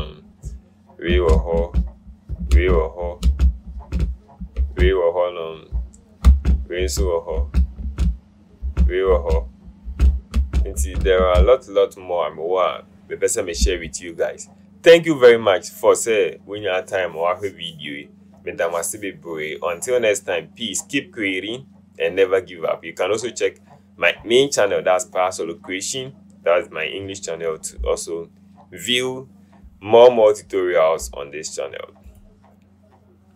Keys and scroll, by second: 1.7 Right, 2.6 Right, 3.3 Right, 3.8 Right, 4.6 Left, 6.3 Right, 6.9 Right, 7.4 Right, 7.9 Right, 8.7 Right, 9.2 Right, 10.0 Right, 10.4 Right, 10.9 Right, 11.3 Right.